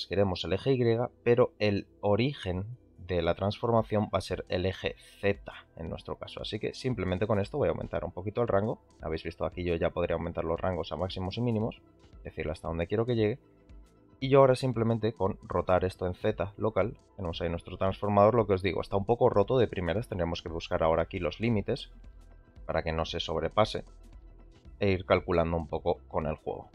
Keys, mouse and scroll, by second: 3.9-6.1 drag, 7.6-11.0 shift+drag, 11.6-13.0 shift+drag, 13.8 click, 15.5 r, 20.6 click, 22.2-23.5 shift+drag, 24.4 r.